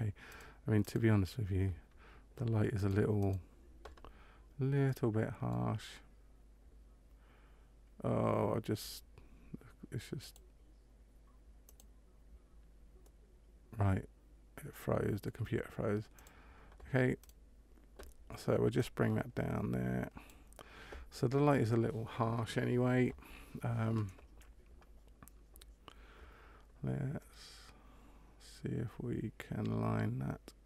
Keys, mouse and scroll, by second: 11.6 click, 12.9 middle click, 16.1 click, 17.2 right click, 18.7 click, 27.1 middle click.